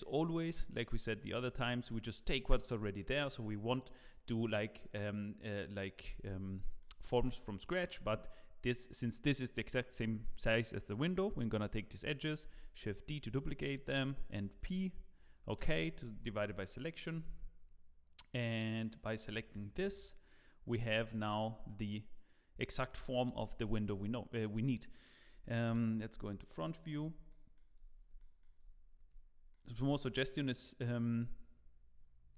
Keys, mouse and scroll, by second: 0.8 shift+click, 1.1 middle click, 6.5 middle click, 7.0 shift+middle click, 10.2 middle click, 12.4 shift+d, 14.5 p, 16.1 Tab, 17.0 click, 17.5-18.2 scroll up 1, 18.2 click, 18.6 click, 19.2 scroll down 2, 19.6 shift+middle click, 20.8 g, 25.0 middle click, 25.7 KP_1, 26.3-26.7 scroll down 9, 26.9-27.9 scroll up 4, 27.3 shift+middle click, 28.2 shift+middle click, 30.0-30.9 scroll up 2.